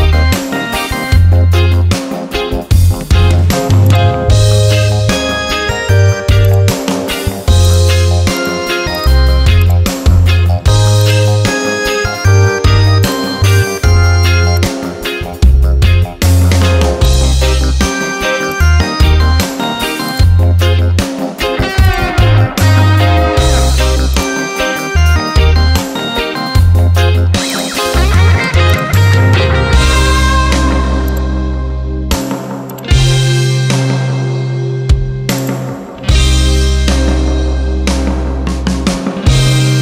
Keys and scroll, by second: 23.0 Return, 36.7 Return.